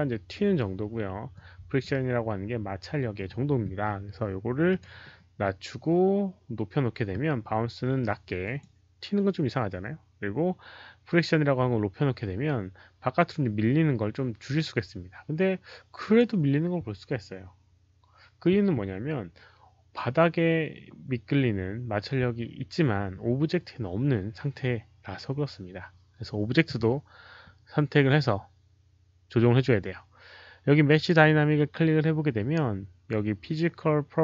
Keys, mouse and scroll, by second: 1.2 click, 4.6 click, 8.3 click, 16.0 click, 19.2 click, 30.8 click.